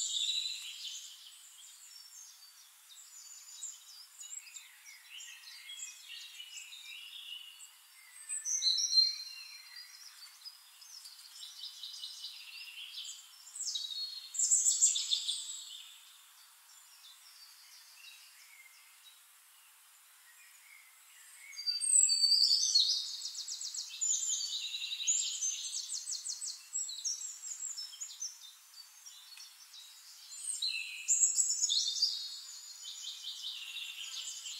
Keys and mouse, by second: 1.4 click, 2.1 ctrl+d, 2.2 ctrl+click, 2.8 click, 2.9 ctrl+d, 2.9 ctrl+click, 3.1 ctrl+d, 3.2 ctrl+click, 3.5 ctrl+d, 3.5 ctrl+click, 3.9 click, 3.9 ctrl+d, 3.9 ctrl+click, 4.3 ctrl+d, 4.3 ctrl+click, 4.5 ctrl+d, 4.6 ctrl+click, 4.9 ctrl+d, 4.9 ctrl+click, 5.1 ctrl+d, 5.4 ctrl+d, 5.7 click, 5.8 ctrl+d, 5.8 ctrl+click, 6.4 ctrl+d, 6.5 ctrl+click, 7.2 shift+-, 7.4 click, 7.8 click, 8.1 click, 9.5 click, 10.7-12.7 drag, 13.5 click, 14.0 shift+click, 15.1 ctrl+shift+=, 16.7 click, 17.5 ctrl+d, 18.2 shift+click, 19.1-20.1 drag, 20.6 drag, 21.1 middle click, 21.6 click, 22.7 drag, 24.9 click, 25.7-28.1 drag, 28.4 click, 28.6-29.4 middle drag, 29.4 click, 30.5 click, 31.1 shift+click, 32.1 drag, 32.6 click, 33.0-33.6 middle drag, 34.4 click.